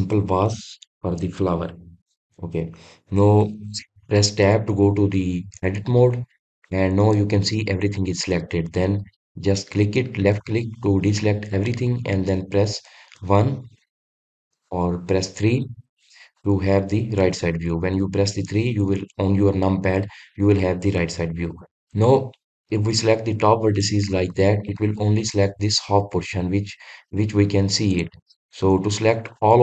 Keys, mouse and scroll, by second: 9.0 click, 11.1-13.1 middle drag, 13.1 KP_1, 23.7 click, 24.7-27.7 middle drag, 27.8 click.